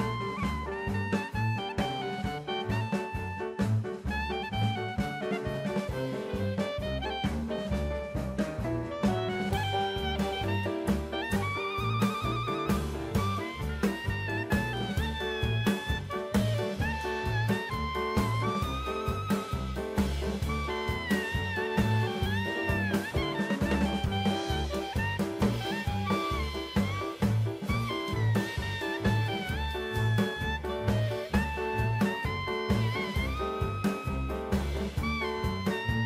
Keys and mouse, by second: 0.0 shift+click, 0.5 shift+click, 1.1 x, 2.2-3.4 middle drag, 3.4 Tab, 5.7 Tab, 6.3 3, 7.3 shift+d, 8.1 right click, 8.6 p, 9.6 Tab, 10.8 click, 11.7-12.0 shift+middle drag, 12.7 click, 13.7 s, 14.0 x, 14.7 right click, 15.1 Tab, 16.3 3, 17.3 a, 17.9 s, 18.0 x, 19.9 shift+d, 20.3 right click, 20.7 click, 21.8 Tab, 22.2-22.7 middle drag, 24.3 shift+a, 28.8-30.4 drag, 30.6 s, 31.8 drag, 32.5 s, 33.0 click, 34.3-36.0 drag, 35.2 KP_0.